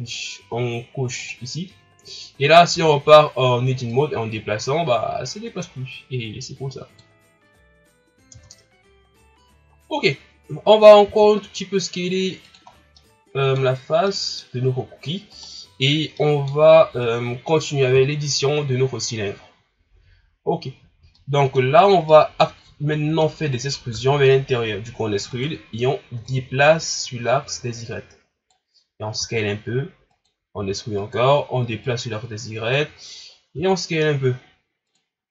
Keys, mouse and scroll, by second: 1.2 click, 1.9 scroll down 2, 2.4 scroll up 1, 2.7 Tab, 3.9-6.9 drag, 7.5-8.3 scroll down 2, 8.3 Tab, 10.0-11.1 scroll up 1, 11.1 s, 12.6-13.0 scroll down 3, 13.0 middle click, 13.7-14.1 scroll up 1, 14.1-15.3 middle drag, 15.3 right click, 15.4-15.9 scroll up 1, 15.9 scroll down 4, 16.2 middle click, 16.6-16.9 scroll up 3, 16.9 Tab, 17.9 KP_1, 19.4-21.0 scroll down 1, 21.1 middle click, 21.7 scroll up 2, 22.1-23.9 middle drag, 23.9 e, 26.3-29.1 drag, 29.1 s, 30.6 e, 31.8-33.5 drag, 33.5 s, 35.1 scroll down 1.